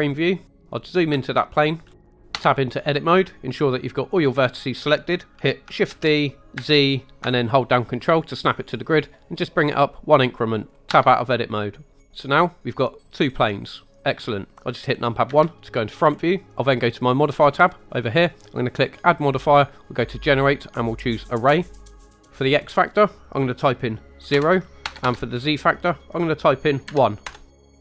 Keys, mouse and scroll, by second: 0.5-1.0 scroll up 5, 1.3-1.7 shift+middle drag, 1.8 scroll down 2, 1.9 shift+middle click, 2.1 scroll up 1, 2.3 Tab, 5.9 shift+d, 6.5 z, 10.5 ctrl+click, 10.9 Tab, 12.0 scroll down 2, 12.2-12.5 middle drag, 13.2-13.6 scroll up 2, 15.3 KP_1, 15.9 scroll up 2, 18.8-21.2 drag, 22.7-27.2 drag, 25.0 Tab.